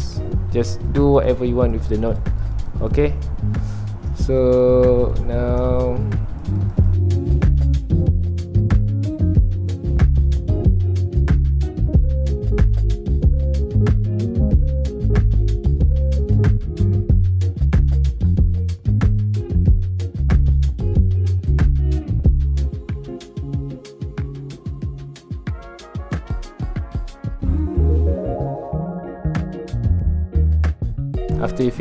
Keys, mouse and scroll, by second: 0.2 middle click, 1.1-3.4 drag, 3.4 middle click, 4.2 scroll down 1, 4.6 ctrl+alt+click, 5.4 scroll down 1, 5.7 shift+middle click, 6.4-8.7 drag, 8.7 middle click, 8.9 scroll up 1, 9.1-11.6 drag, 11.6 middle click, 12.1-13.5 ctrl+alt+drag, 13.5 middle click, 13.7 click, 14.6 middle click, 14.9-16.5 ctrl+alt+drag, 16.5 middle click, 17.1-18.6 drag, 18.6 middle click, 18.8 ctrl+alt+click, 19.2 middle click, 19.6 click, 20.1 middle click, 20.7-22.7 ctrl+alt+drag, 22.7 shift+middle click, 22.9-23.2 scroll up 2, 23.3 scroll down 1, 23.3-24.7 middle drag, 24.7-26.4 drag, 26.4 middle click, 26.8 click, 27.7 shift+middle click, 28.0 click, 28.5 middle click, 28.9-30.8 drag, 30.8-31.8 middle drag.